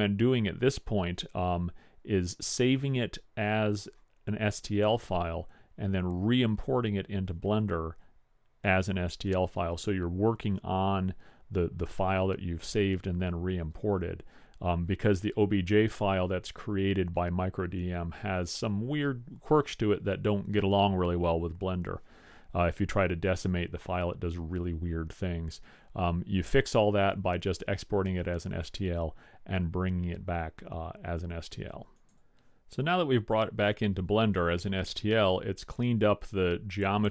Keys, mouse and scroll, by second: 21.1-23.5 middle drag, 35.8-36.3 drag, 36.6-37.1 middle drag.